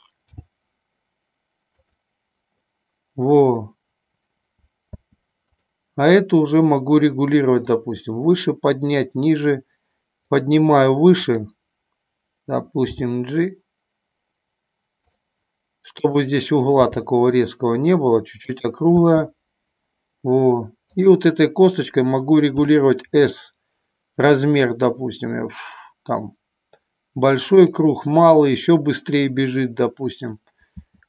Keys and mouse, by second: 0.4 g, 5.1 space, 8.0-10.3 drag, 11.3 click, 13.1 g, 16.0 click, 16.8 g, 18.6 click, 19.0 space, 21.0 click, 22.7 s, 30.9 space.